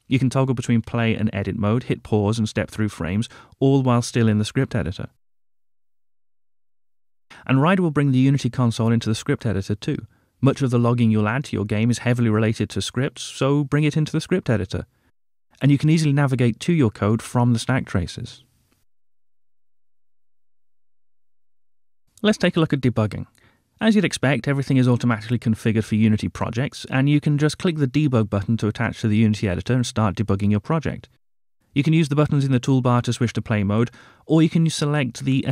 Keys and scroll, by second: 25.6 ctrl+d.